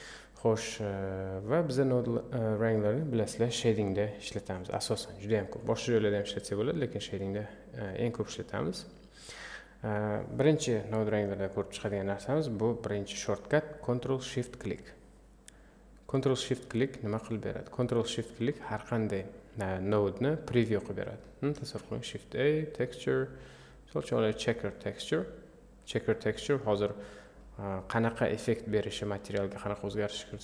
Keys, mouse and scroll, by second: 3.3 click, 7.1-16.2 drag, 24.2 shift+a, 26.1-30.4 middle drag.